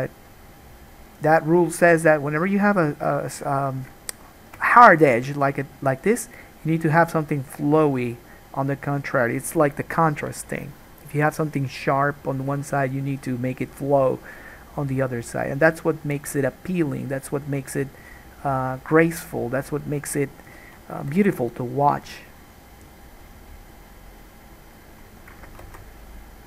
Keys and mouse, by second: 21.2 k, 25.9 alt+a.